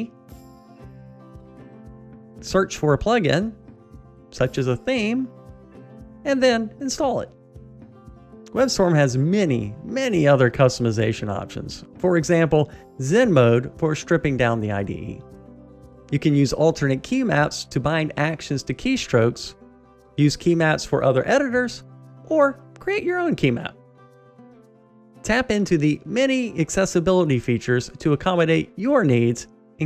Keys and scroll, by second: 8.6 ctrl+`.